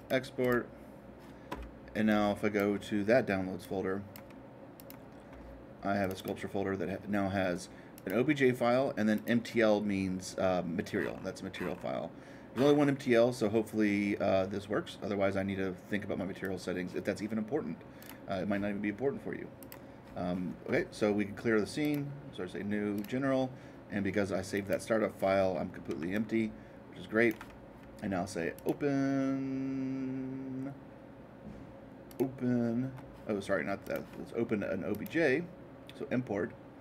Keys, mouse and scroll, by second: 0.0-2.0 drag, 2.0-4.0 drag, 4.7-6.7 drag, 7.9-9.9 drag, 10.9-14.5 middle drag, 16.4-18.4 drag, 19.6-21.6 drag, 21.8-23.8 drag, 24.5-25.9 drag, 26.1-28.1 alt+drag, 28.5-30.5 drag, 32.1-34.1 drag, 34.9-36.8 drag.